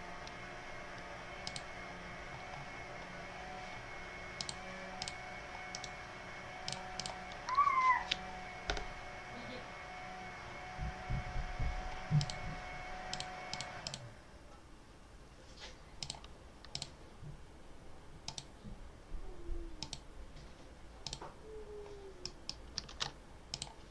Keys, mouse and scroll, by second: 1.3 click, 2.1-2.6 scroll down 2, 4.2 click, 4.9 click, 5.6 right click, 6.6 click, 12.0 click, 13.0 click, 13.4 click, 15.9 click, 16.6 click, 18.1 click, 19.7 click, 20.9 click, 22.1 click, 22.8 ctrl+s, 23.4 click.